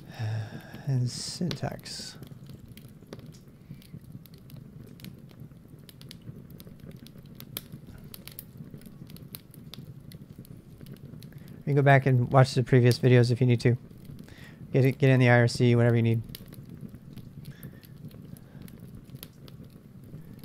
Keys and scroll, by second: 0.0-3.3 typing, 3.3 Return, 6.7 Return, 7.8-11.0 typing, 13.7-14.5 typing, 15.7 Return, 16.3-20.4 typing.